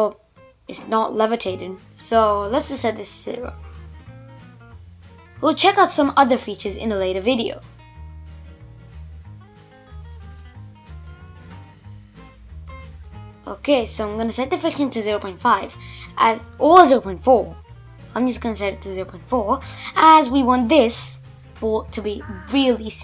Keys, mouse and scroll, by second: 0.1 shift+Left, 1.0 space, 2.2-4.9 middle drag, 4.9-5.6 scroll up 3, 5.6-7.0 middle drag, 7.0 space, 8.0-8.8 scroll down 1, 8.8 click, 10.7-14.6 drag, 16.8 shift+Left, 17.5 Return, 19.1 space.